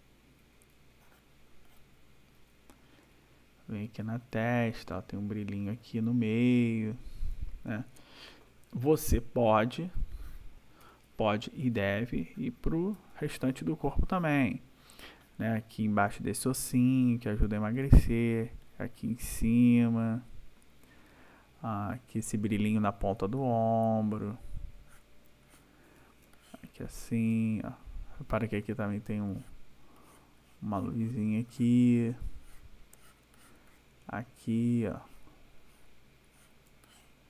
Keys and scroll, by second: 0.4 ], 2.4 ], 8.4 ctrl+-, 10.0 space, 10.8 ], 12.9 \, 17.2 ], 20.5 \, 24.2 \, 26.2 space, 28.3 ], 32.1 ], 34.0 space, 36.7 space.